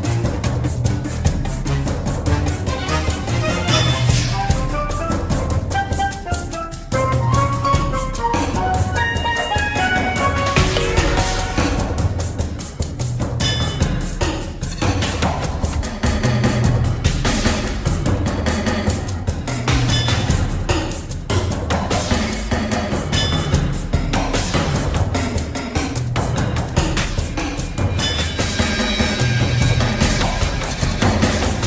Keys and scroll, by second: 3.8 ctrl+c, 4.4 space, 9.0 ctrl+d, 10.1 ctrl+h, 12.5-16.1 typing, 16.2 ctrl+a, 17.4 BackSpace, 17.5 Return, 25.9 ctrl+c, 26.5 space, 29.8 ctrl+v, 30.3 Return.